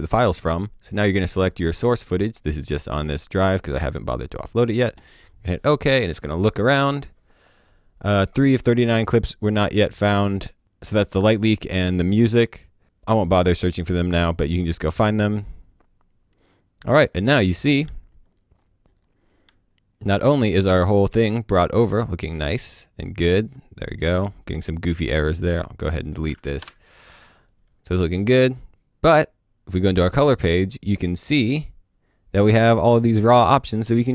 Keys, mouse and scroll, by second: 1.0 click, 4.2 click, 13.9 click, 16.3 click, 17.8 alt+click, 17.9-19.3 alt+scroll up 1, 19.3 scroll up 2, 19.5-20.1 alt+scroll down 1, 20.1-20.6 scroll down 1, 20.6 click, 21.9-22.5 scroll down 1, 22.5-23.1 scroll up 1, 23.1-23.7 scroll down 1, 23.7-25.3 scroll up 1, 25.3 click, 26.6 BackSpace, 27.4 click, 33.1 click.